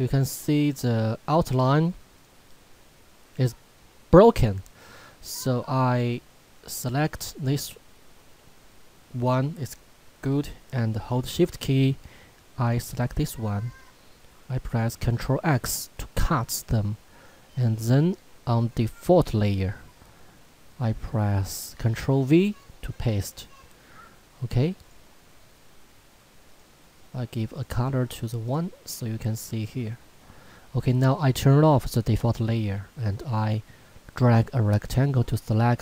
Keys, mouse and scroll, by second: 6.9 click, 11.1 shift+Num_Lock, 12.6 shift+click, 15.6 ctrl+x, 18.5 click, 22.0 ctrl+v, 24.8 click, 31.9 click.